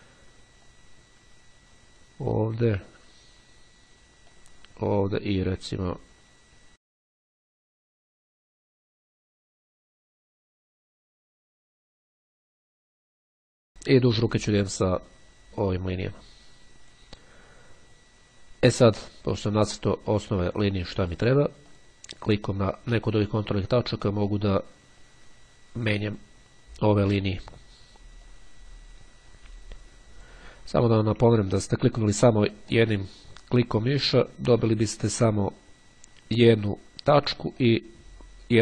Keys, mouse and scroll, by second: 0.6-2.7 drag, 4.4-5.8 drag, 5.9-6.4 scroll down 2, 6.4 scroll down 1, 7.2-7.8 scroll down 2, 11.4-13.0 drag, 16.0-17.6 drag, 19.0-20.6 scroll up 5, 21.7 click, 24.1-26.8 drag, 27.1-27.6 scroll up 1, 28.4-30.8 drag, 30.8-31.4 scroll down 1, 31.4-32.1 ctrl+scroll down 1, 32.9 click, 36.4-38.4 drag.